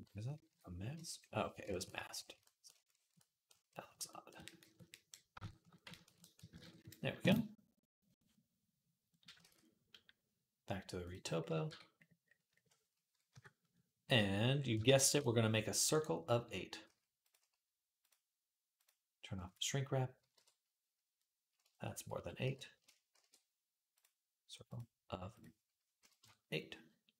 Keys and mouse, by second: 0.3 alt+m, 6.3 ctrl+Tab, 8.2 middle click, 8.2 right click, 9.7 ctrl+s, 10.9-14.5 middle drag, 11.5 Tab, 13.1 KP_3, 14.8 shift+a, 16.6 s, 17.8 click, 18.5 click, 20.1 KP_1, 21.9 x, 22.9 shift+a, 24.6-27.1 drag, 24.6 x, 24.6 shift+a.